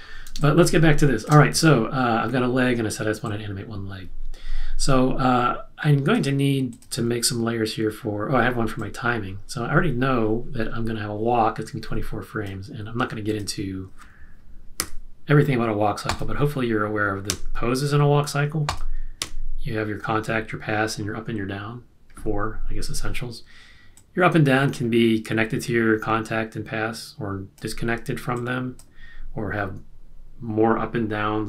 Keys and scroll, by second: 0.3 space, 17.3 F7.